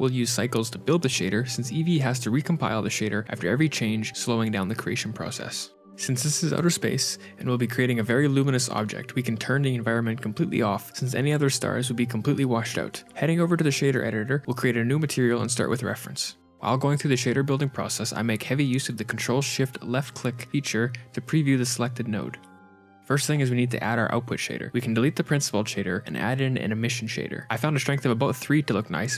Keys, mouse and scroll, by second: 0.4 KP_Divide, 0.7 KP_7, 1.1-3.3 scroll up 1, 1.1 z, 8.4 click, 9.3 click, 14.5 click, 15.5 click, 25.6 x, 26.2 shift+a, 27.8 click.